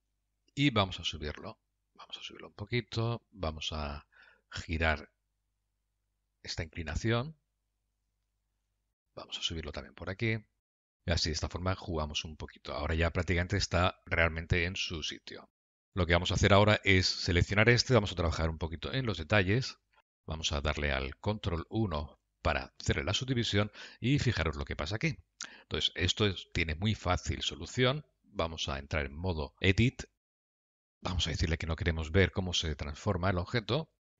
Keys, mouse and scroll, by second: 0.1 click, 0.9 g, 3.7 click, 4.2 g, 8.7 scroll down 2, 9.1 shift+middle click, 9.5 click, 10.0 g, 11.3 middle click, 15.6 shift+middle click, 16.1 Tab, 16.8 click, 19.6-20.0 scroll down 4, 20.0 middle click, 22.4 ctrl+1, 23.8 middle click, 29.2 Tab, 31.2 click, 33.1-33.6 scroll up 2, 33.8 middle click.